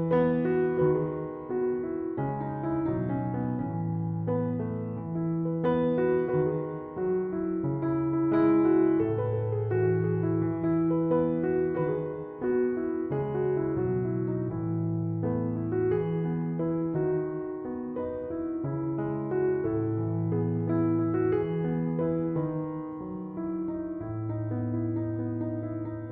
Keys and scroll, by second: 7.5-8.8 typing.